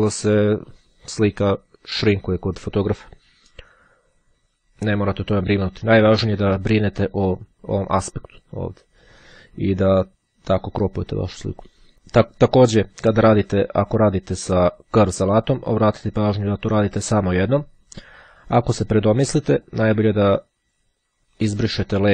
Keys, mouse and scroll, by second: 19.6 click.